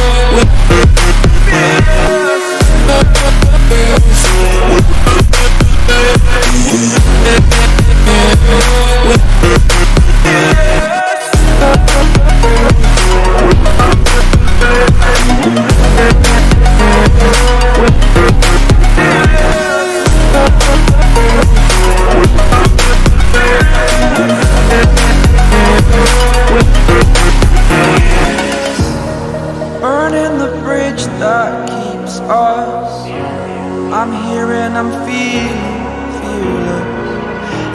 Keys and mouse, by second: 0.6 click, 3.4 click, 15.3 click, 16.0-16.7 typing, 20.8 click, 21.5 click, 25.0 click, 25.8-26.5 typing, 28.0 click, 28.5 0.